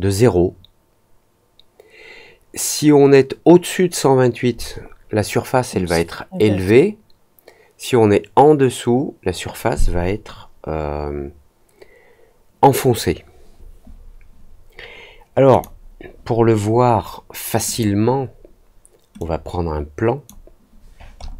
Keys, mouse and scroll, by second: 15.4 click, 17.6 click, 19.1-20.2 drag, 21.1 middle click.